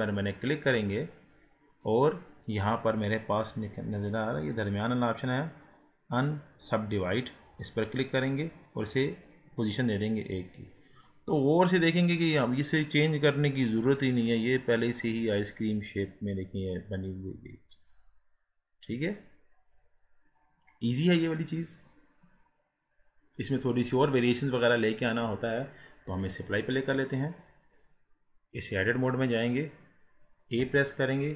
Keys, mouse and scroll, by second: 1.0-1.4 scroll down 2, 1.4-7.4 middle drag, 7.4 click, 9.1-10.8 drag, 10.8-14.0 middle drag, 14.0 scroll up 1, 14.4 scroll down 1, 15.0-17.9 middle drag, 17.9-19.8 scroll up 4, 19.8 scroll down 1, 20.4-22.2 middle drag, 22.2-22.8 scroll down 3, 22.8-26.0 scroll up 3, 26.6-30.6 drag, 30.6 a.